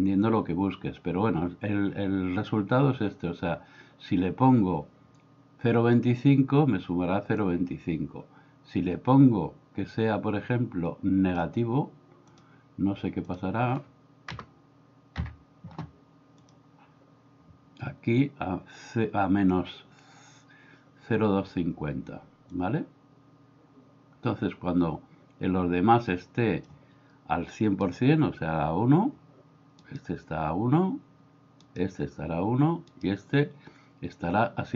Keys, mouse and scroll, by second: 7.4-11.4 drag, 12.3-16.4 drag, 22.6-26.7 drag.